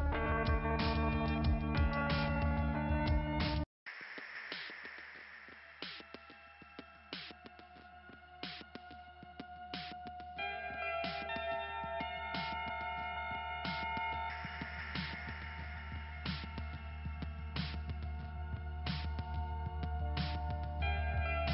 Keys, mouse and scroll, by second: 16.0 scroll up 2.